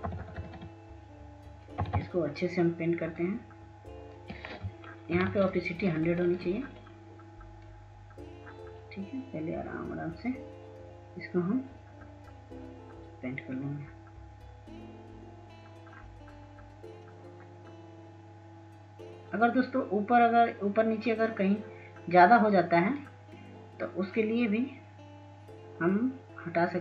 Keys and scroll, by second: 2.8 [, 3.0 [, 4.4 [, 4.6 [.